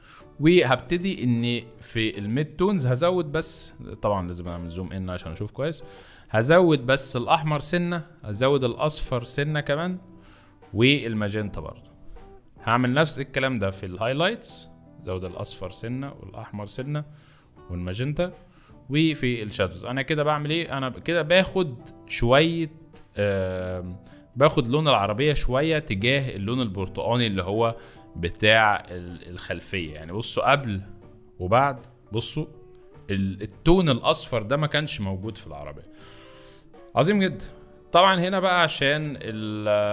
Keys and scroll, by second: 0.4 F2, 3.5 z, 4.8 space, 6.1 space, 25.1 z, 29.6 z, 37.5 z, 38.0 space, 39.1 z.